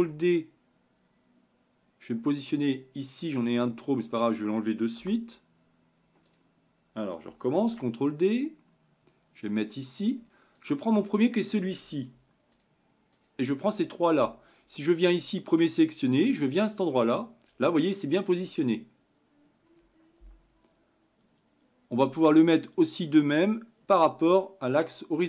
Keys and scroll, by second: 8.2 ctrl+d.